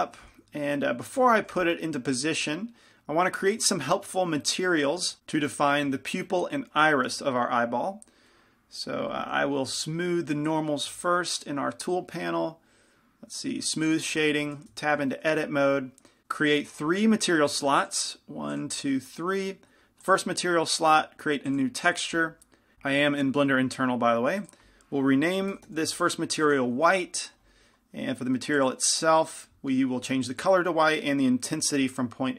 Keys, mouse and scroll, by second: 0.3-1.8 drag, 0.3 g, 1.5-14.0 middle drag, 4.6-5.7 drag, 14.0-22.7 drag, 14.9 Tab, 30.4-32.3 drag.